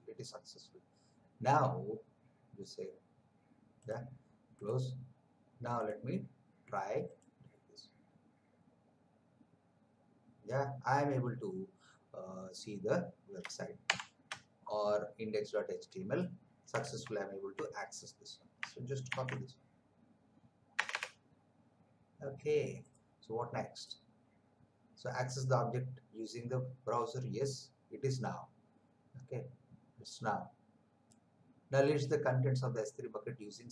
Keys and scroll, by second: 13.8 shift+Print, 17.0 alt+Tab, 19.1 ctrl+v, 20.7 Return.